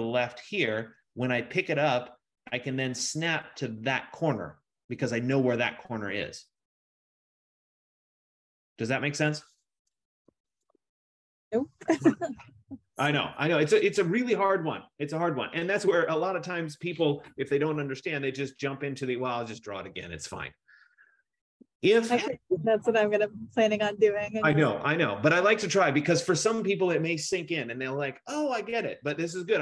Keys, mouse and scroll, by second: 7.3 F15, 10.1-11.2 typing.